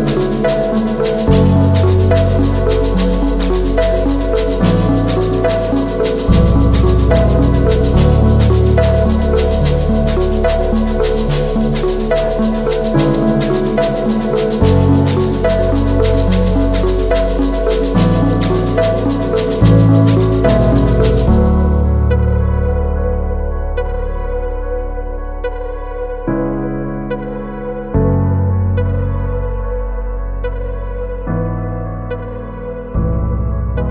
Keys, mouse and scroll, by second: 22.0 ctrl+click, 23.4 right click.